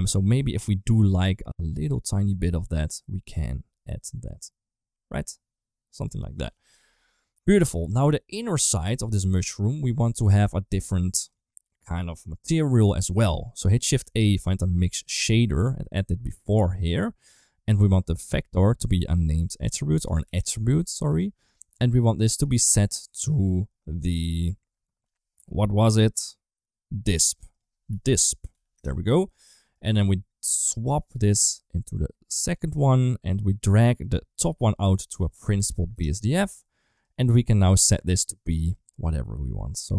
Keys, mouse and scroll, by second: 7.0 right click, 7.8 ctrl+s, 7.8-8.3 middle drag, 10.4 middle click, 11.3 click, 13.8 shift+a, 17.5 middle click, 18.3-21.0 drag, 20.0 t, 22.1-25.2 drag, 27.4-28.5 drag, 29.5 middle click, 30.8 drag, 31.8 click, 32.0 click, 32.6 middle click, 33.8-36.8 drag.